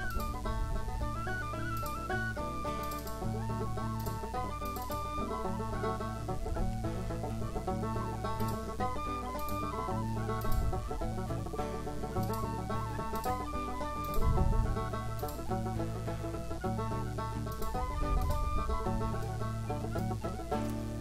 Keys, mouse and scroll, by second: 0.1 click, 1.8 click, 2.8 click, 4.0 click, 8.4 click, 10.4 click, 12.2 click, 13.2 click, 14.0 click, 15.2 click, 17.5 click, 18.2 click, 19.2 middle click, 20.6 ctrl+middle click.